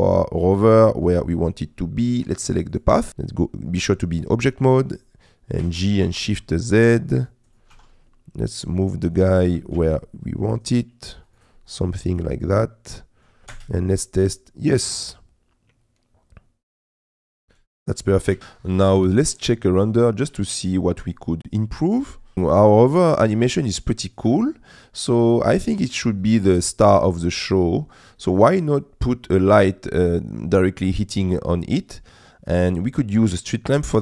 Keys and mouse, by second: 0.5 click, 5.6 g, 6.2 shift+z, 7.8 r, 7.8 z, 9.5 g, 9.8 shift+z, 11.8 click, 12.0-13.3 middle drag, 13.5 space, 17.5 space, 18.3 g, 20.4 z.